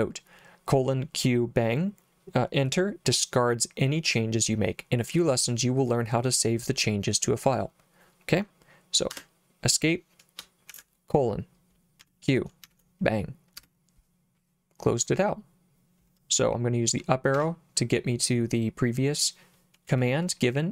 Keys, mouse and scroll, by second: 10.7 shift+;, 12.0 q, 12.7 shift+1, 13.6 Return, 17.4 Up.